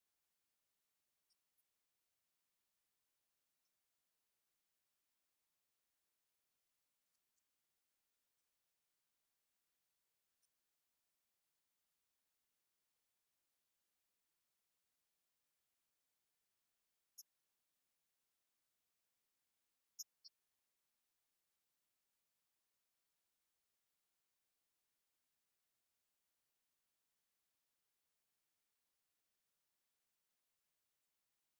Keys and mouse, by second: 0.6-2.0 drag, 2.9-4.4 drag.